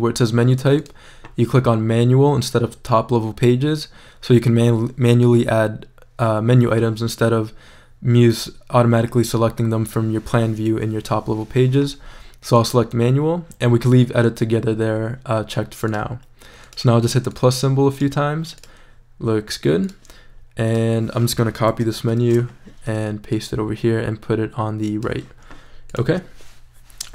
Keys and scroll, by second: 22.0 super+c, 22.2 super+v.